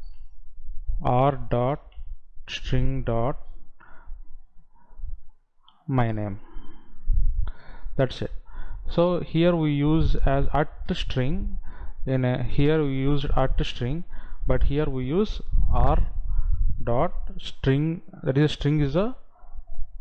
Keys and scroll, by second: 5.7 Down, 6.9 Right.